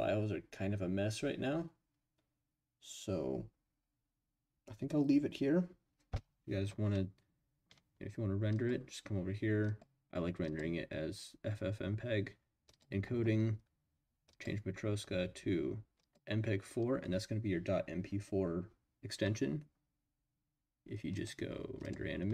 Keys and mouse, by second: 9.6-10.6 drag, 12.7 click, 14.4-16.1 drag, 21.1-22.3 drag.